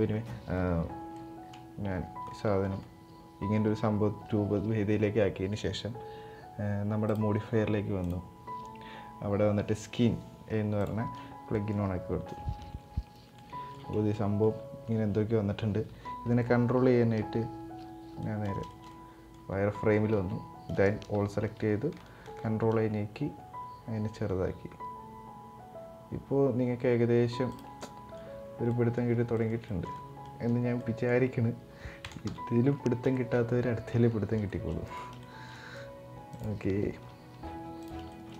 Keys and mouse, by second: 0.8 middle click, 1.7 Tab, 2.0 middle click, 6.8 click, 7.9-10.5 drag, 11.2 middle click, 13.1-13.4 middle drag, 13.8 middle click, 16.8 z, 17.9-18.2 middle drag, 18.3 shift+middle click, 18.6-19.1 middle drag, 19.4 middle click, 19.8 Tab, 20.8 a, 21.9 ctrl+a, 27.5 middle click, 28.0 Tab, 28.3-28.7 middle drag, 29.1 middle click, 29.3 shift+middle drag, 29.7 middle drag, 30.5 middle click, 32.0 KP_1, 32.8 shift+middle drag, 33.6 Tab, 34.1 shift+middle click, 34.5 right click, 35.0 shift+middle click, 35.4 right click, 37.8 shift+e, 37.8 shift+middle click, 38.1-38.3 right drag.